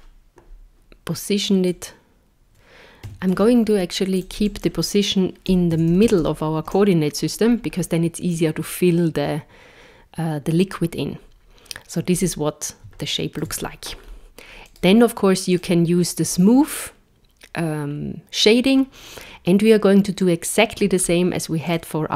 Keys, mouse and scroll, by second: 1.7 click, 4.1 click, 12.1-12.8 scroll up 2, 13.0 shift+middle click, 14.0-14.6 scroll up 1, 14.6 right click, 14.6 scroll up 1, 21.0-21.3 scroll down 2, 21.7 click.